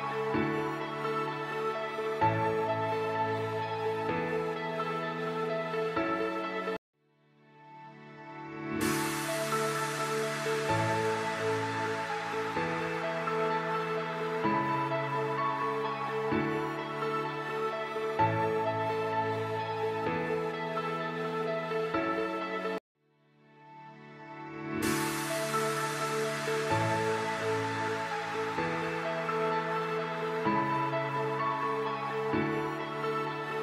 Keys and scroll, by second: 2.7 shift+F2, 3.1 shift+Page_Up, 3.4 F3, 23.1 F4, 23.6 Escape, 27.4 shift+F2, 27.8 F3.